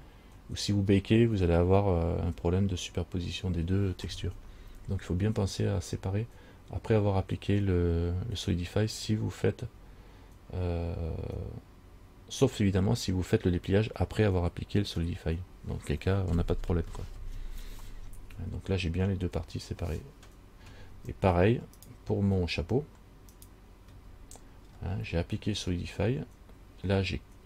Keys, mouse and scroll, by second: 21.1 Tab, 22.0 right click, 23.5 right click, 24.1 Tab, 24.9-25.5 scroll down 2, 25.5-26.7 scroll down 3.